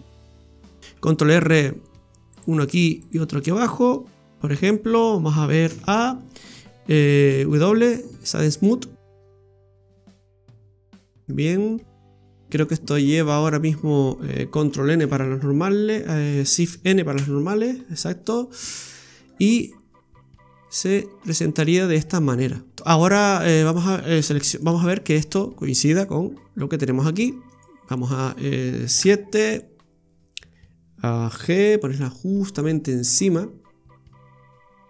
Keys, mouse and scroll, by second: 0.8 scroll up 4, 1.0 ctrl+r, 2.7 ctrl+r, 4.9-5.4 scroll down 1, 5.4 scroll down 1, 5.7 a, 5.9 scroll down 2, 6.2 middle click, 7.0 Tab, 7.3 w, 8.9 scroll down 1, 9.3 middle click, 9.9 middle click, 10.2 middle click, 11.7 Tab, 12.4 Tab, 13.1 Tab, 15.0 ctrl+n, 17.3 shift+n, 18.2 scroll up 1, 18.5 scroll down 1, 18.7 right click, 19.1 scroll down 1, 19.3 middle click, 22.7 scroll up 1, 23.1-23.5 scroll down 2, 23.5 right click, 24.3 Tab, 24.5 right click, 25.9 click, 26.6 middle click, 27.5 right click, 28.9 KP_7, 31.5 g.